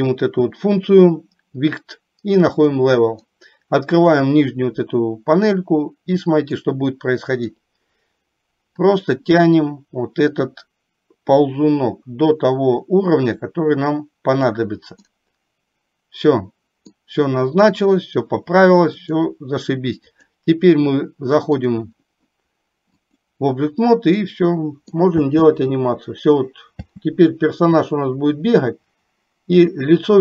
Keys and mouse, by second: 4.0 click, 6.6 middle click, 9.0-14.6 drag, 15.1-17.1 middle drag, 19.0-20.4 drag, 23.1 click, 24.1 middle click, 25.4 space, 27.0 space, 28.0-30.2 drag.